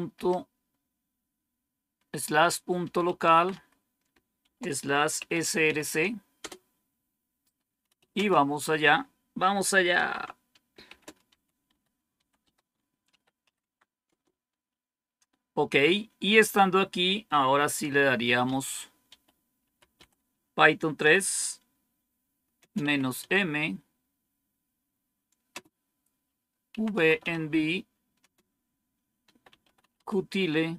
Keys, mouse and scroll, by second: 0.0-0.6 typing, 2.5-8.4 typing, 9.8-14.5 typing, 17.9-21.4 typing, 22.5-23.1 typing, 25.4-30.7 typing.